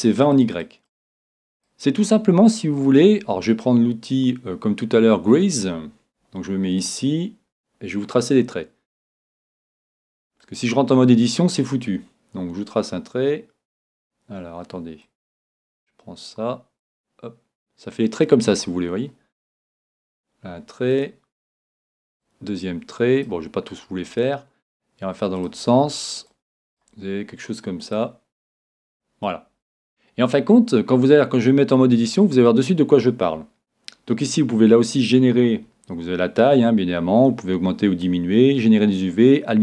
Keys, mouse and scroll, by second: 6.8-10.2 drag, 15.1-17.0 drag, 21.0-22.8 drag, 25.4-27.3 drag, 27.9-29.6 drag, 29.8-31.3 drag, 34.0-36.4 middle drag, 36.4-39.6 drag.